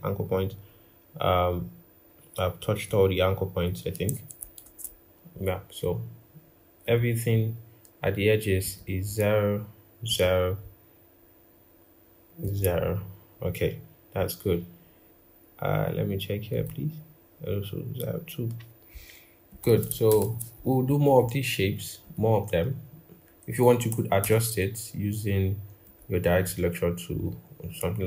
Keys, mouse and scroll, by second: 4.5 ctrl+z, 19.9 ctrl+-, 20.0 ctrl+-, 24.0 a.